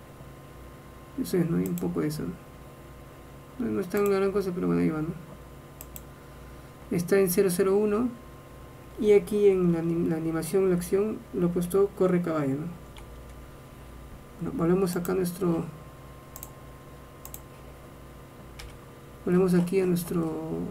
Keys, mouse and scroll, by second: 16.5-18.3 drag, 18.7 n.